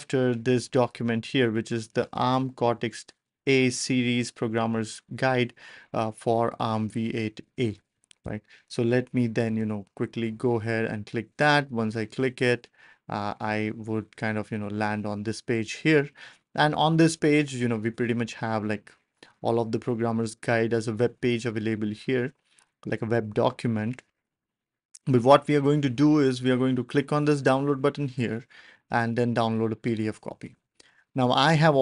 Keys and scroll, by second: 8.2 BackSpace, 9.4 ctrl+alt+super+p.